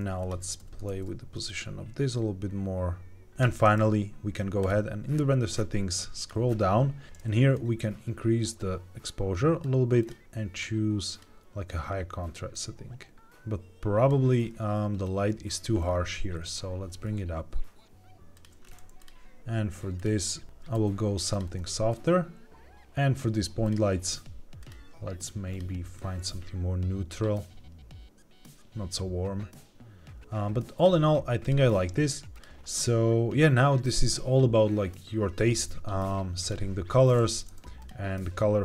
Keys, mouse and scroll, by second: 0.5 g, 0.8 shift+z, 3.3 click, 4.5 click, 5.0-5.4 scroll down 2, 6.1 click, 6.1-7.0 scroll down 3, 7.0 ctrl+z, 7.4-9.6 drag, 9.9-11.2 drag, 12.4-14.1 drag, 14.9 click, 15.7-16.3 scroll down 2, 16.3 g, 18.2 click, 18.5-18.9 scroll up 1, 18.9 click, 19.9 click, 21.2 click, 23.5 click, 24.5 click, 25.4 click, 31.3 click, 32.2 click, 37.7 click.